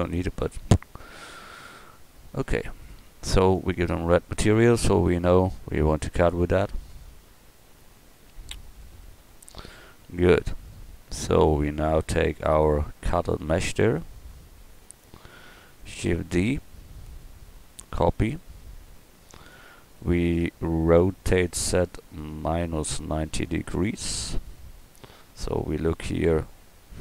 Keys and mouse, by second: 8.9 KP_1, 16.1 shift+d, 21.3 r, 24.6-25.1 middle drag.